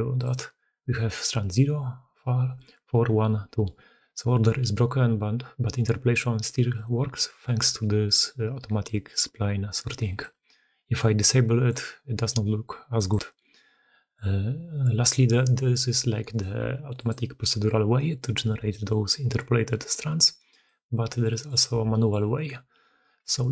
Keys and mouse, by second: 0.0-6.7 middle drag, 11.3 drag, 12.8 click, 13.3-14.1 drag, 16.7 g, 20.2 click, 21.1 drag, 21.6 Tab, 21.8 click.